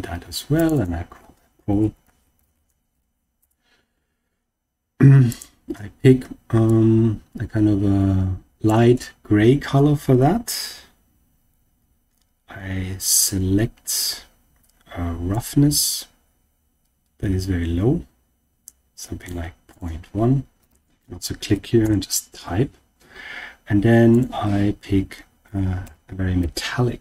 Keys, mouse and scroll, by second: 0.7-3.4 drag, 5.2 click, 10.2-10.8 scroll down 1, 11.3-12.5 scroll down 1, 12.5-15.2 scroll down 3, 15.2-19.3 drag, 19.6-21.8 drag, 24.0-27.0 drag.